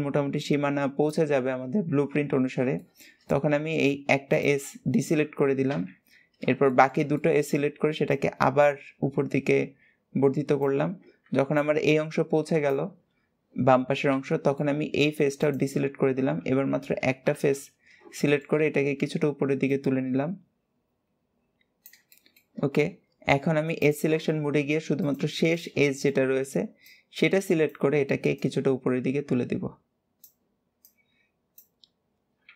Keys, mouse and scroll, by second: 2.2-2.5 scroll down 2, 2.5-4.1 shift+middle drag, 4.1 shift+click, 5.5 middle click, 6.5-7.8 shift+middle drag, 7.8 click, 11.0 click, 14.5 middle click, 15.2 shift+click, 18.0 shift+middle click, 18.4 scroll up 2, 19.5 click, 21.9-23.6 shift+middle drag, 23.6 click, 24.8 click, 25.3-26.7 shift+middle drag, 26.7 click, 28.1 click, 30.6 click.